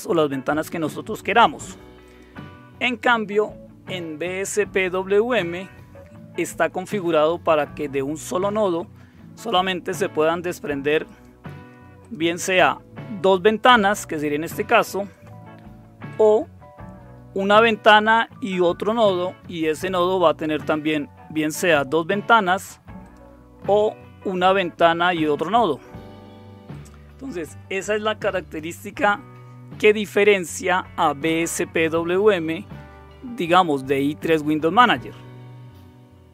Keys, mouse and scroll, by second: 11.0 click, 12.0 click, 12.4 click, 15.1 click, 15.8-17.1 drag, 23.0 click, 26.7 click.